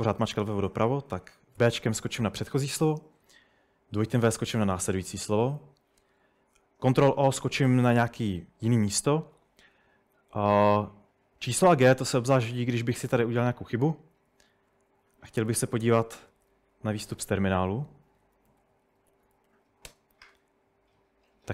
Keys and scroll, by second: 0.0-2.4 typing, 4.1-5.4 typing, 6.9 typing, 7.7 ctrl+o, 13.5-19.4 typing, 15.3 Escape, 16.2 ctrl+n, 16.8 ctrl+super+Right, 19.5 Tab, 19.9 Return.